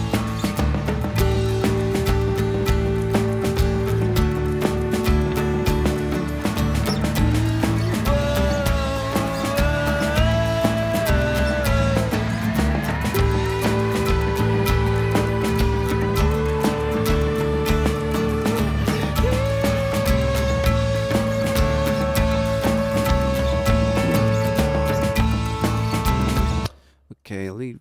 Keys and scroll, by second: 2.5 super+=, 26.4 space.